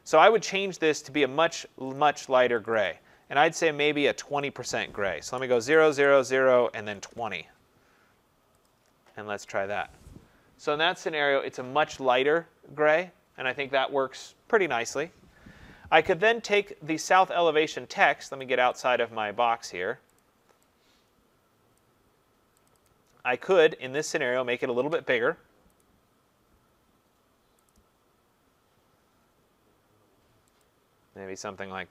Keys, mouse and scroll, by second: 0.5 click, 2.0 click, 2.7 click, 2.9 click, 4.7 click, 5.4 typing, 5.6 Tab, 5.9 Tab, 6.2 Tab, 6.7-7.4 typing, 8.7 click, 9.5 click, 10.5-11.3 typing, 18.4 click, 18.9 click, 20.2 click, 21.8 click, 22.7 click, 22.9 click, 24.6 click, 25.8 click, 30.6 click.